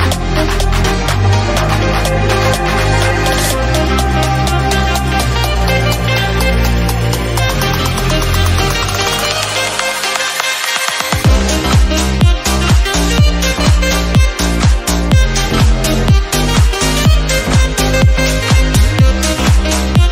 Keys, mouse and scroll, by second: 0.5 ctrl+r, 1.6-2.6 middle drag, 2.6 ctrl+r, 3.5-3.8 scroll down 4, 3.8 click, 4.3 /, 4.7 shift+middle click, 5.5-6.9 scroll up 1, 8.5 1, 8.9-10.8 drag, 10.8 middle click, 11.2 Tab, 12.2 click, 13.1 Tab, 13.3-13.7 scroll down 1, 13.7-15.2 drag, 15.2 shift+middle click, 15.7 click, 17.4 click, 18.5 shift+middle click, 19.1 click, 20.0-20.1 shift+drag.